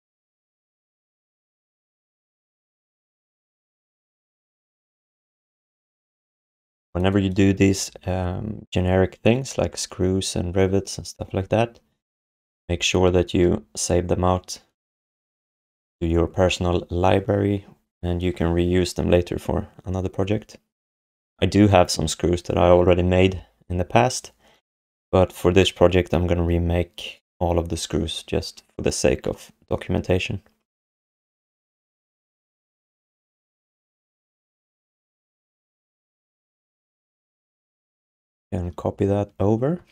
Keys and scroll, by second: 1.2 w, 3.6-5.6 typing, 12.5 alt+shift+d, 13.3 ctrl+s, 36.3 alt+q, 37.7 space, 39.8 ctrl+d.